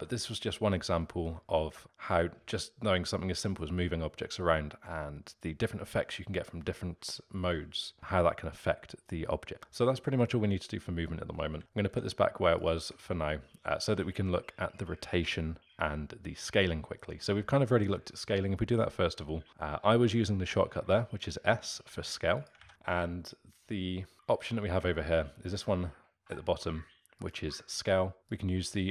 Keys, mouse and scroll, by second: 11.5 x, 11.6 ctrl+z, 11.9 Tab, 12.5 click, 12.8 Tab, 21.1 s, 22.6 ctrl+z, 27.1 click, 28.2 ctrl+z, 28.2 click.